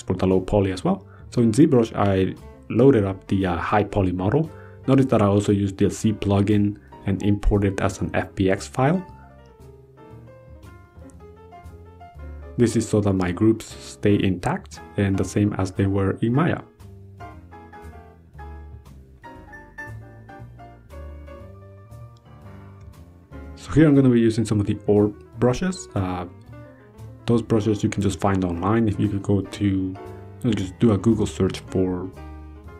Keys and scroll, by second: 24.4 ctrl+z, 25.7 ctrl+z, 29.3 ctrl+z, 30.5 ctrl+z, 31.3 ctrl+z.